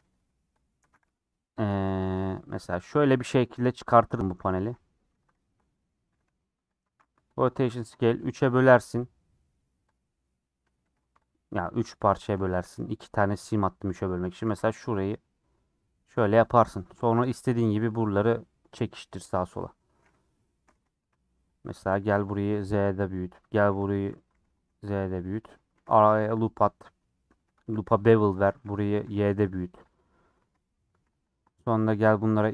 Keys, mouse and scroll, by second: 0.8 s, 1.7 s, 3.0 g, 4.4 s, 5.2 s, 6.2 s, 7.4 ctrl+a, 7.5 Tab, 7.8 ctrl+r, 10.8 2, 11.3 alt+click, 15.1 alt+e, 16.3-17.9 middle drag, 17.9 3, 18.4 click, 18.7 click, 19.1 KP_4, 19.5 KP_3, 19.8-20.5 scroll down 3, 20.5 shift+middle click, 20.7 alt+z, 21.0 1, 21.8 click, 21.9 g, 23.2 click, 23.7 g, 24.4 g, 25.7 ctrl+r, 27.4 2, 27.7 ctrl+b, 28.5 s, 30.4 alt+z, 30.5 middle click, 31.0 3, 31.3 click, 31.9 shift+click, 32.4 shift+click.